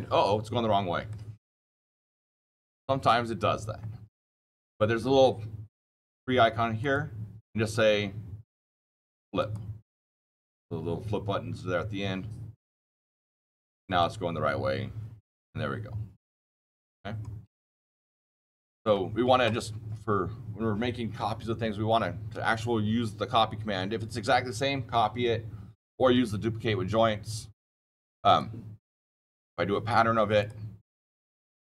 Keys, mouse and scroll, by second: 0.2-1.0 scroll up 6, 1.0 click, 1.0-1.3 scroll, 4.2 click, 9.3 click, 13.8 click, 14.5-16.8 scroll, 17.8-18.2 scroll, 18.2 middle click, 18.2 shift+middle click, 27.6-31.6 drag.